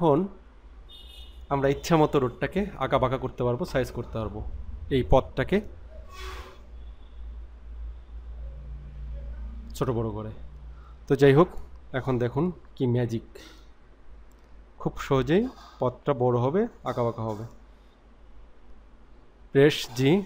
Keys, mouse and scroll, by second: 2.9 scroll down 1, 3.6 scroll up 1, 19.9 g.